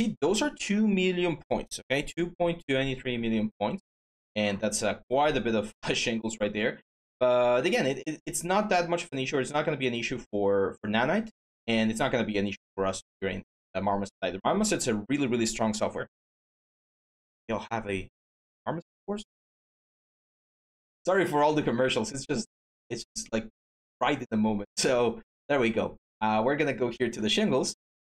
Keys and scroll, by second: 1.8-2.6 typing, 3.0 Tab.